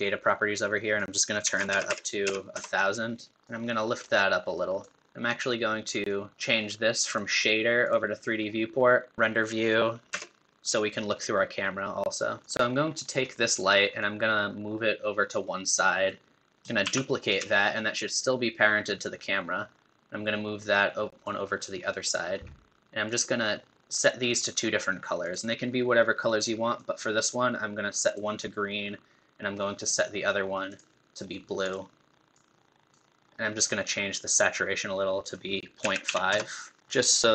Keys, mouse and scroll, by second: 7.5-9.1 drag, 10.1 KP_0, 12.7-16.3 middle drag, 16.9 shift+d.